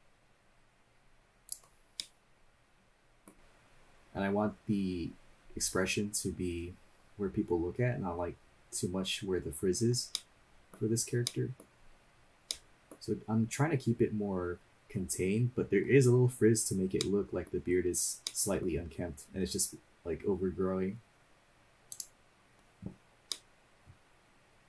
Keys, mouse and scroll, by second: 2.0-3.3 middle drag, 3.3 scroll down 1, 10.1 middle click, 11.2 middle click, 12.6 middle click, 16.5 scroll up 2, 17.0 middle click, 18.2-19.0 middle drag, 19.0-19.6 scroll down 1, 21.9 click, 23.3-24.6 middle drag, 23.3 scroll down 2.